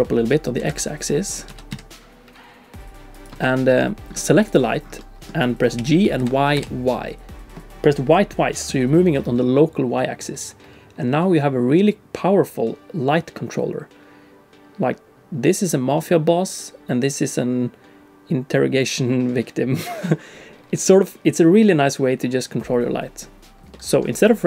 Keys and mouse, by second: 0.6 a, 1.5 s, 3.4 Tab, 3.7 click, 4.4 click, 5.0 click, 5.8 g, 23.7 middle click.